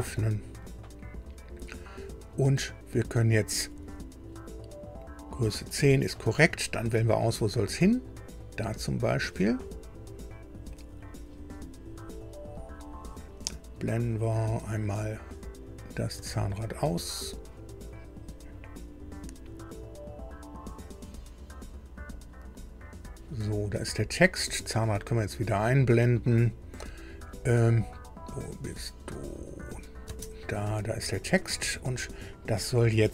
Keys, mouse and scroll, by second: 0.2 click, 8.2 click, 12.1 scroll down 2, 15.6 click, 17.7 scroll down 2, 18.3 scroll up 2, 18.9 scroll up 2, 19.3 scroll down 2, 22.1 click, 29.6 click, 30.0 space, 30.8 scroll up 2, 31.4 click, 32.7 shift+click.